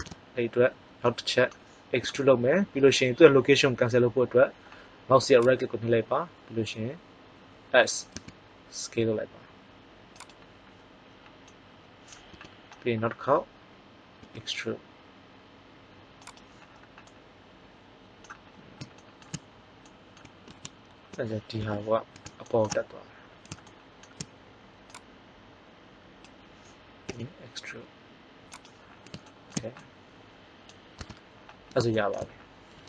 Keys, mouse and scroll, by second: 1.1 middle click, 2.0 e, 5.5-7.4 drag, 8.0 s, 12.4 KP_1, 14.1 e, 20.4 ctrl+z, 21.5 KP_1, 24.9-26.8 drag, 27.0 e, 28.8-30.3 middle drag, 30.9 Tab.